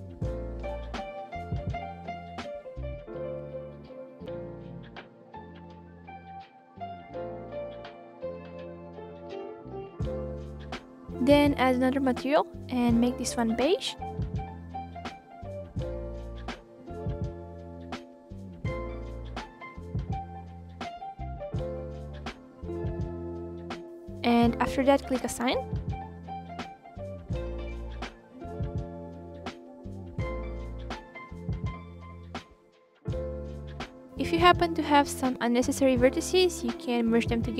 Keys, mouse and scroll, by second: 0.3 shift+click, 1.1 shift+click, 1.3-2.0 scroll up 3, 2.0 shift+Left, 2.7 shift+Left, 3.4 shift+Left, 4.1 shift+Left, 4.5 middle click, 4.7 scroll down 2, 4.8 scroll up 1, 5.1 ctrl+Left, 5.6 shift+Left, 5.8 shift+Left, 6.1 shift+Left, 6.6-7.1 scroll up 1, 7.1 shift+Left, 7.2 scroll down 1, 7.4 scroll up 2, 7.6 shift+click, 7.8 shift+click, 7.9 scroll down 1, 8.2-8.6 scroll up 1, 8.6 shift+click, 8.8-9.5 scroll down 7, 9.5 middle click, 10.3 KP_1, 10.4 scroll down 2, 10.6 scroll up 2, 10.8-11.4 scroll down 1, 11.4-12.7 drag, 13.0 Delete, 13.8 shift+a, 14.4 f, 15.9 shift+a, 16.6-17.0 drag, 18.1 shift+a, 18.9 drag, 19.6-20.0 drag, 20.7-29.3 drag, 29.3 f, 29.8-33.7 drag, 33.7 f, 34.1 click, 34.7-35.5 scroll down 4, 35.5-36.7 scroll down 2, 37.4 click.